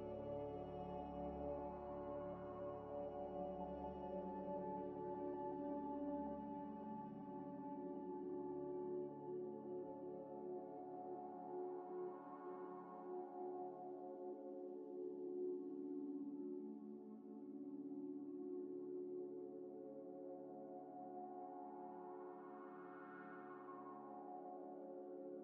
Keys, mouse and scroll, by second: 1.1 right click, 2.7 double click, 3.0 right click, 4.5 ctrl+z, 4.6 ctrl+z, 5.7 g, 5.9 y, 6.8 double click, 7.4 g, 7.5 x, 10.0 Delete, 10.7 Delete, 10.7 Delete, 11.3 Tab, 11.9 Tab, 11.9 scroll up 1, 12.1 scroll down 1, 12.9 Tab, 13.2 scroll down 1, 15.1 scroll down 1, 15.2 scroll up 1, 15.5-16.4 scroll down 1, 17.3 scroll up 1, 17.8 shift+a, 19.0 g, 19.1 z, 20.1 g, 20.3 y, 21.0 scroll, 21.0 scroll up 1, 21.5 s, 21.6 z, 23.3 g, 23.3 z, 25.2 scroll up 1.